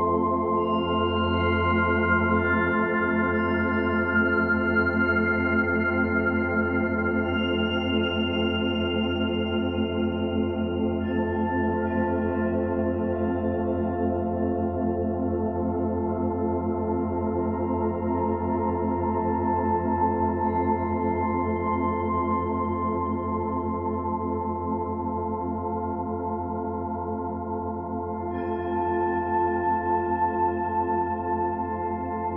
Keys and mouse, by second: 2.2-3.4 typing, 2.9-6.7 alt+shift+drag, 6.7 typing, 7.1 click, 8.0-10.1 drag, 10.8 typing, 12.3 ctrl+z, 12.5 ctrl+z, 12.9 ctrl+z, 16.3-18.8 drag, 21.4 click, 23.3 click, 24.1 click, 26.1 1, 26.5 ctrl+alt+click, 28.1 click, 29.9 Tab, 31.6 click.